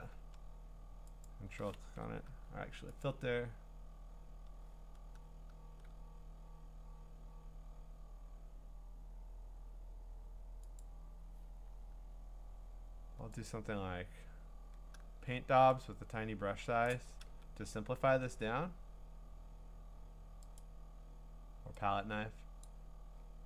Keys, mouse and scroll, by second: 1.3 ctrl+click, 1.8 ctrl+d, 3.0 click, 5.8 click, 10.8 click, 13.5 click, 16.8 click, 20.6 click, 22.7 click.